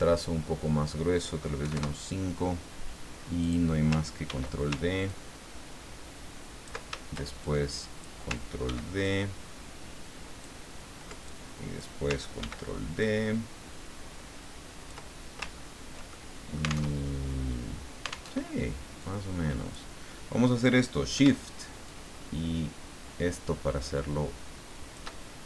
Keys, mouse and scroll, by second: 1.6 KP_5, 1.7 KP_Enter, 3.4 click, 4.2 ctrl+d, 5.1-6.8 ctrl+drag, 7.4 shift+click, 8.6 ctrl+d, 9.0-10.6 ctrl+drag, 11.4 ctrl+click, 12.4 ctrl+d, 13.0-15.0 ctrl+drag, 15.5-15.9 ctrl+scroll down 2, 16.1 ctrl+click, 16.9 alt+Tab, 18.3 alt+Tab, 19.0-20.0 drag, 21.9-25.2 shift+drag.